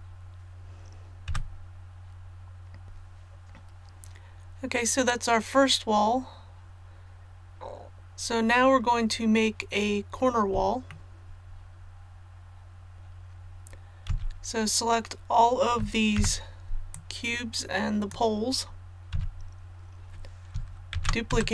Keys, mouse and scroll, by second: 1.2 a, 2.8 click, 5.6-6.0 scroll down 1, 10.9-12.9 shift+middle drag, 14.0 z, 16.1 b, 16.9-18.5 drag, 19.1 z, 20.9 shift+d.